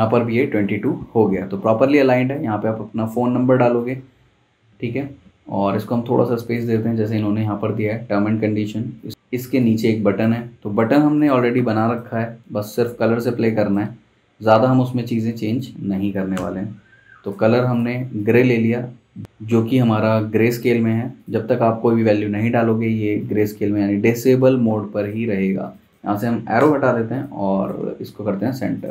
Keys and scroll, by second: 3.0 super+g, 9.1 super+z, 12.1 super+z, 16.3 i, 20.7 v, 26.6 BackSpace.